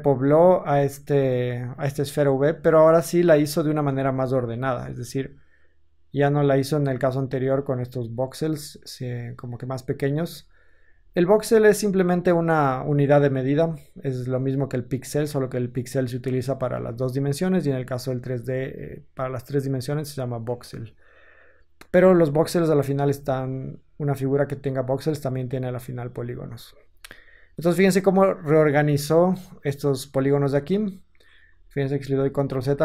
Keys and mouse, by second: 23.0 Tab, 24.6-32.8 middle drag, 26.9 Tab, 31.4 ctrl+z, 31.9 ctrl+z, 32.4 ctrl+z.